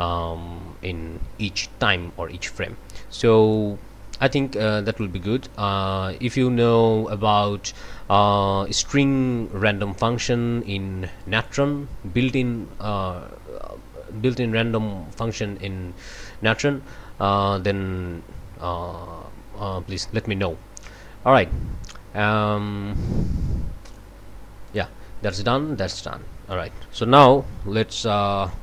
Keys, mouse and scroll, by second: 2.1 scroll up 2, 3.4 click, 4.3 click, 4.9 click, 11.2 click, 12.2 click, 18.8 scroll down 2, 19.6-20.1 scroll down 2, 20.3-20.8 scroll up 2, 23.9 click, 24.7 click, 25.9 click, 26.5 click, 27.6 1.